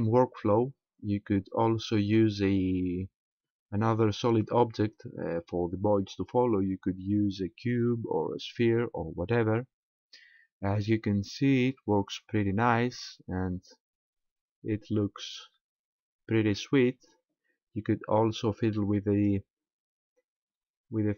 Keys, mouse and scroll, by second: 19.2 click.